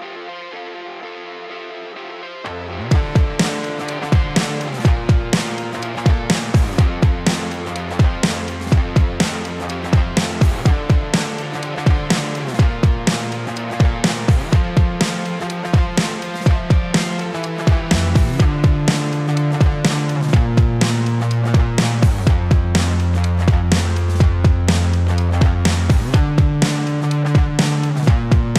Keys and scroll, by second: 19.0 ctrl+z.